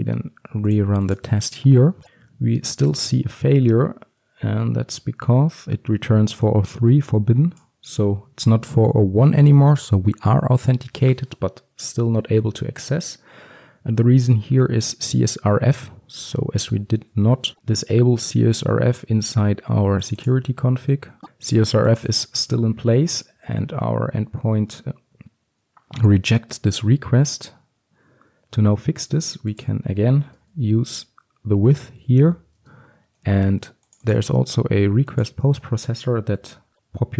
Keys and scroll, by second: 18.7 alt+1, 23.6 alt+1, 32.7 Return, 34.4 ctrl+c, 36.0 ctrl+v.